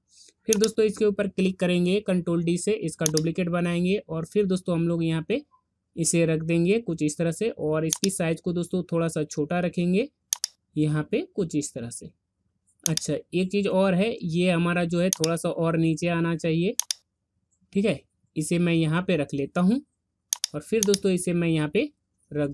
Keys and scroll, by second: 2.2 ctrl+d.